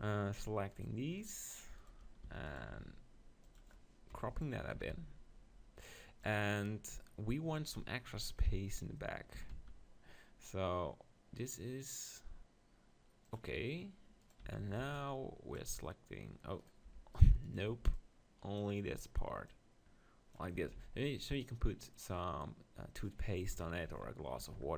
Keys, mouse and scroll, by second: 2.4 e, 2.7 s, 3.4 right click, 3.5-5.4 drag, 4.1 KP_7, 4.7 s, 6.3-8.2 drag, 9.4 s, 13.3-15.2 drag, 14.2-16.0 right drag, 14.4 z, 14.8 b, 16.6-17.8 right drag, 17.8 b, 19.3 middle click, 19.5-20.8 drag, 20.5 Tab, 20.8 z, 23.6 KP_7, 23.9 z, 24.4 Tab.